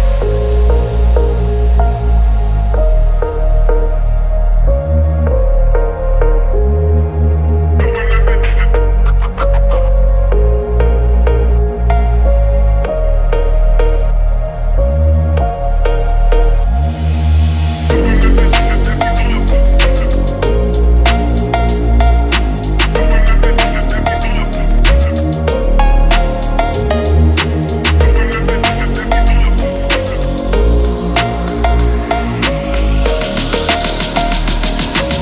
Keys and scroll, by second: 18.5 BackSpace.